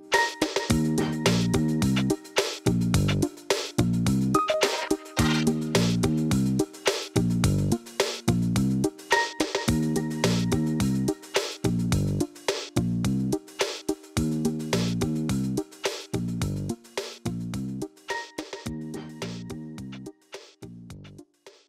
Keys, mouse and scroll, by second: 0.3 scroll up 2, 0.7-1.2 shift+middle drag, 1.2 shift+click, 2.1 shift+d, 4.1 r, 6.0 click, 6.9 click, 7.8 g, 9.0-9.9 scroll down 1, 9.9 shift+d, 12.7 click, 13.4-14.4 scroll down 1, 14.4-15.6 scroll down 1, 15.6 ctrl+s, 18.0-19.0 shift+middle drag, 19.0 KP_1, 19.7 shift+s.